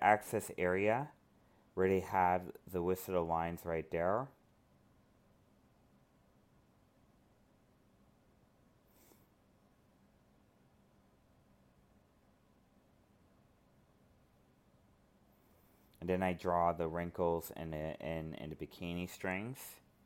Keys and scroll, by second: 2.5 alt+space, 5.2 alt+space, 6.8 alt+space, 9.6 ctrl+z, 10.1 alt+space, 11.1 ctrl+z, 19.0 ctrl+z.